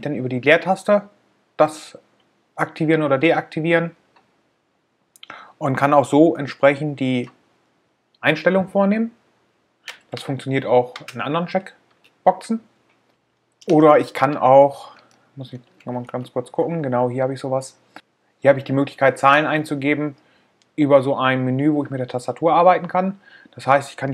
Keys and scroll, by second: 1.0 space.